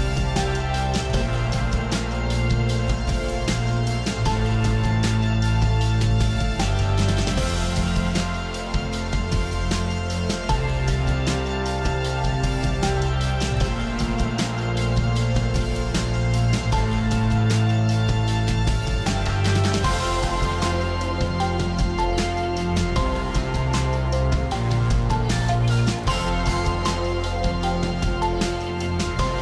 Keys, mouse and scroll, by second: 0.5 click, 1.7 click, 2.6 click, 10.5 click, 13.3 click, 17.7 click, 19.3 click, 21.4 click, 22.4 click, 23.3 click, 25.2 click.